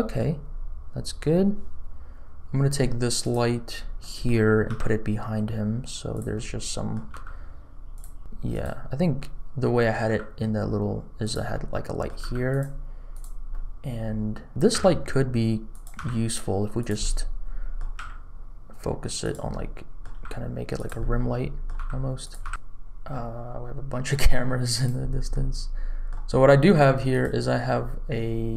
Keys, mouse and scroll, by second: 0.4-1.6 scroll up 1, 3.2 click, 3.7 scroll down 2, 4.0 middle click, 4.8 g, 6.3 click, 6.3 middle click, 7.1 g, 9.1 middle click, 10.0 g, 11.5 middle click, 12.1 g, 13.1 click, 13.5-14.5 middle drag, 14.7 r, 15.9 g, 17.0 middle click, 17.9 r, 19.5 middle click, 20.1 g, 21.0 middle click, 21.7 g, 22.4 g, 22.7 click, 22.7-23.1 scroll down 1, 22.7 x, 23.1-24.1 middle drag, 24.7 click, 25.0 scroll up 2, 25.3 middle click, 27.1 click.